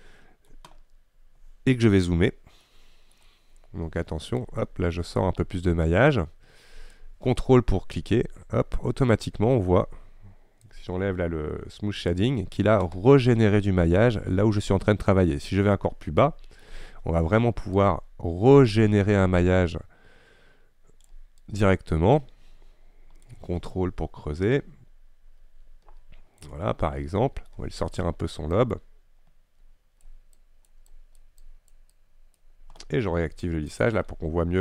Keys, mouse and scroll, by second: 0.0 middle click, 1.0-2.4 scroll up 1, 2.4-2.7 scroll up 1, 2.7-4.5 shift+middle drag, 4.5-14.9 drag, 14.9-15.8 scroll up 2, 15.8-17.8 shift+middle drag, 17.8-21.1 drag, 21.5-26.7 drag, 26.7-27.1 scroll down 2, 27.1 middle click, 27.6-28.6 scroll up 1, 28.6-34.3 drag, 34.3-34.6 scroll down 2.